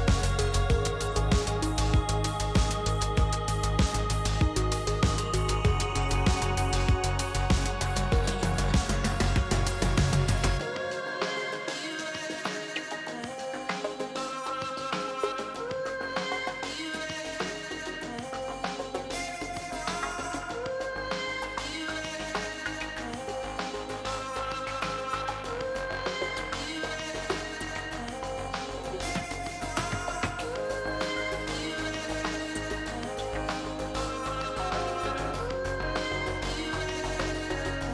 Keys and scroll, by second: 10.7 s, 11.8 s, 12.3 s, 13.3 s, 26.4 p.